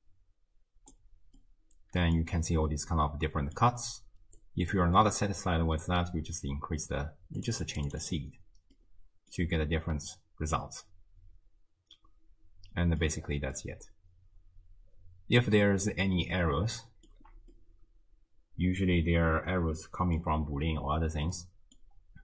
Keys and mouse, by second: 1.4 middle click, 2.8-3.6 middle drag, 4.4-4.8 drag, 5.0 middle drag, 7.4 click, 8.8-9.4 middle drag, 9.9-13.1 middle drag, 13.7-17.2 middle drag, 17.6-20.2 middle drag, 21.4-21.8 middle drag.